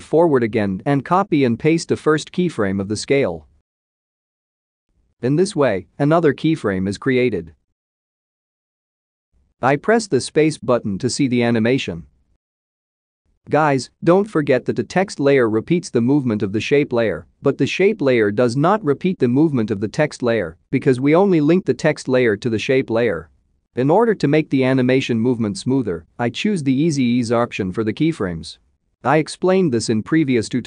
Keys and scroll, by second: 3.6 ctrl+c, 4.3 ctrl+v.